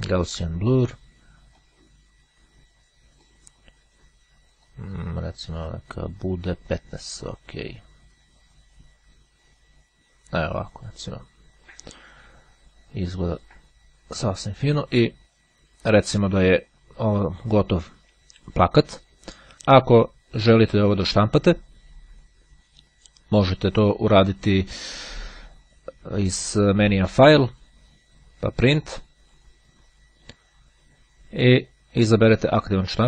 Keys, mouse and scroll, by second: 1.7-3.9 drag, 4.7 click, 5.6 click, 7.1 click, 25.9-27.5 drag, 29.3 click.